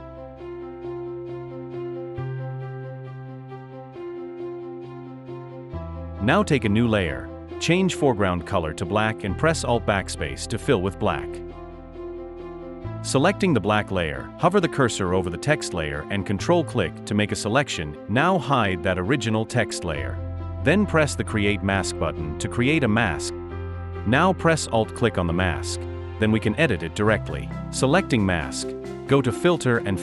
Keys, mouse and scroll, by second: 1.7 v, 13.2 alt+BackSpace, 15.5 ctrl+click, 24.8 alt+click.